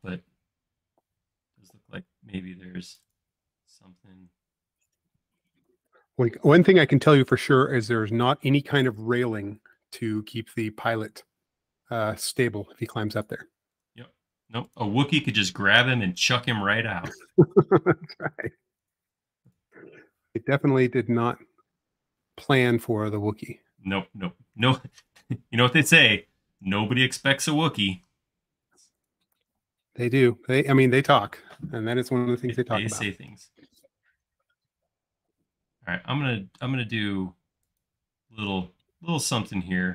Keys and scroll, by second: 3.6 l, 5.1 space, 6.2 l, 15.3-16.3 typing, 19.3 space, 30.9 l, 31.4 space, 32.2 l, 33.2 q.